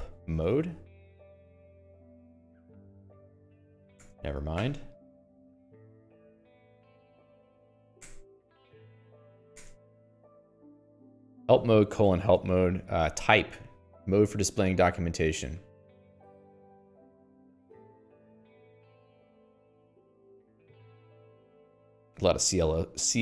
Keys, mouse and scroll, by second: 0.0-1.6 typing, 1.8 alt+x, 2.6 Return, 4.4 Return, 5.0 0, 5.6 Escape, 7.6-10.4 typing, 16.0 middle click, 17.4-17.7 scroll down 5, 17.7-18.6 scroll up 10, 18.6-22.0 scroll.